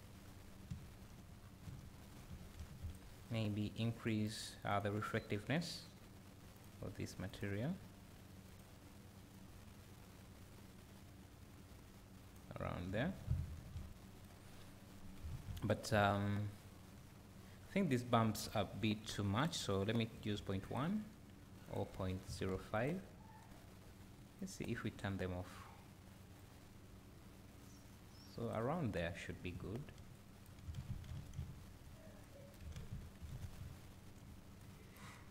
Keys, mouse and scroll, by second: 0.7 `, 1.4 scroll up 2, 1.7 `, 2.3-3.0 scroll down 1, 3.0 click, 4.3 click, 4.7 click, 6.6 click, 12.9 `, 17.6-20.4 scroll up 1, 20.6 click, 22.7 click, 24.4-35.3 drag, 28.8-29.5 scroll down 2, 29.5 `, 31.1 alt+a, 31.3 `, 33.7 `.